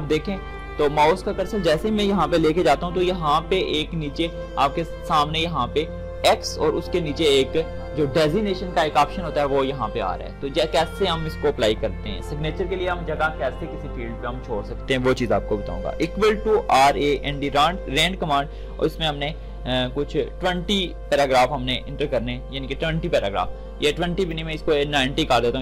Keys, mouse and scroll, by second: 16.0-18.2 typing, 19.9-21.3 typing, 22.0 Return, 24.3-25.6 drag.